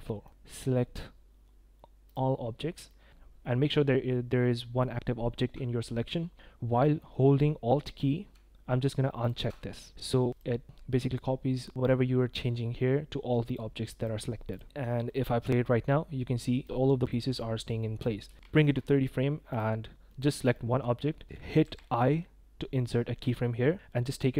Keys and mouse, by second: 0.3-2.1 drag, 2.9 click, 9.2 alt+click, 15.5 click, 16.8 click, 17.1 drag, 18.2 space, 18.5 shift+click, 18.7 drag, 20.1-20.5 drag, 21.6 i.